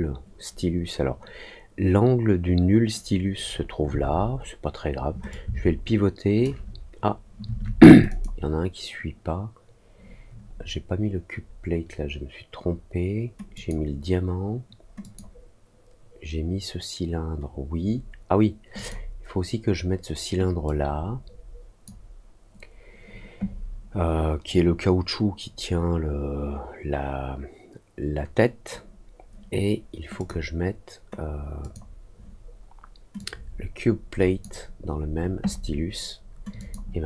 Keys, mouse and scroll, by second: 5.2-6.4 shift+drag, 8.0 click, 13.5 click, 15.0 click, 18.7 click, 20.6-21.8 drag, 30.1 click, 31.5 click, 33.1-34.3 drag, 36.5 click.